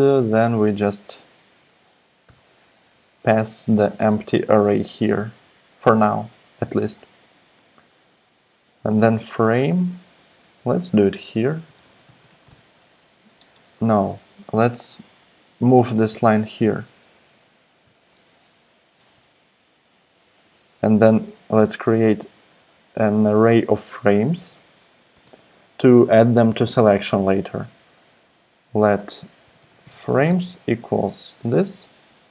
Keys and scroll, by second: 2.2 ,, 2.3 space, 2.8 [, 2.9 ], 3.6 Right, 3.9 Right, 4.2 Left, 9.5 Up, 9.5 Down, 10.1 Up, 10.4 Right, 10.8 Return, 10.9 Return, 11.3-14.4 typing, 16.2 shift+super+Left, 17.8 super+x, 18.1 super+BackSpace, 20.3 Return, 21.9 l, 24.3 e, 25.1 t, 25.2 space, 29.2-31.4 typing, 31.6 Left, 31.7 Down, 31.7 Down, 32.1 Left.